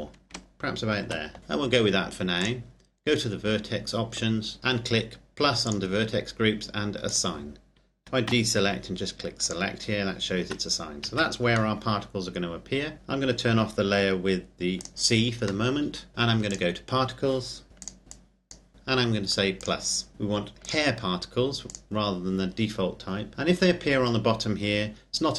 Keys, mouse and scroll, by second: 0.4 ctrl+KP_Subtract, 2.5 click, 5.9 click, 8.5 a, 9.7 click, 10.5 Tab, 11.1 z, 11.8 middle click, 14.8 click, 15.8 middle click, 16.5 click, 18.1 click, 20.6 click, 23.3-25.1 scroll down 1.